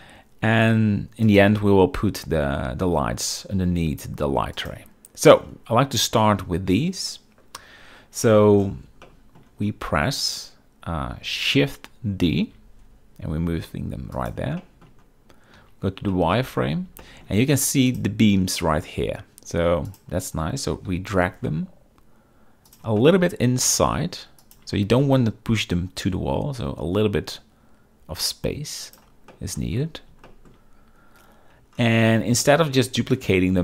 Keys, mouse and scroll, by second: 1.4 click, 4.7 click, 7.7 KP_7, 9.1 shift+middle click, 12.5 shift+d, 14.7 shift+drag, 15.8 z, 16.2 shift+middle drag, 17.1 shift+middle drag, 18.0 click, 20.0 click, 20.8 g, 21.1 y, 23.1 shift+middle click, 23.8 g, 24.5 shift+click, 24.9 g, 29.4 shift+middle drag, 30.4 shift+middle drag, 32.5 shift+middle drag.